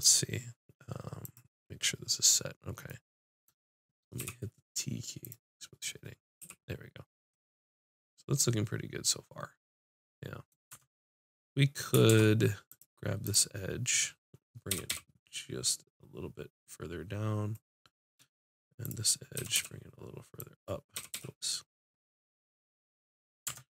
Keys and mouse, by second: 2.6 click, 4.2 t, 5.2-7.0 drag, 6.4 t, 10.7 Tab, 11.3 click, 12.1 ctrl+Tab, 13.2 click, 14.7 g, 17.9 click, 19.3 g, 20.9 g, 23.4 Tab.